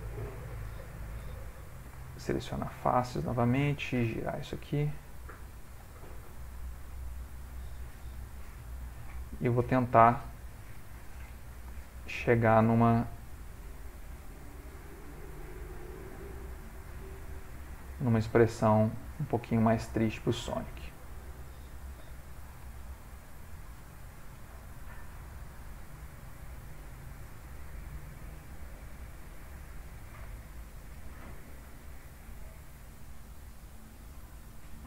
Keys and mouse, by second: 1.4 3, 1.7 click, 2.2 shift+click, 3.4 click, 4.3 r, 6.2 click, 6.4 g, 8.4 2, 8.9 click, 9.2 g, 11.8 shift+click, 13.1 g, 17.2 click, 17.4 g, 19.4 click, 19.6 g, 22.3 3, 22.5 click, 22.7 g, 23.3 Escape, 23.8 click, 24.4 g, 27.1 click, 27.7 g, 29.9 click, 30.6 shift+click, 31.0 g, 34.1 click, 34.5 g.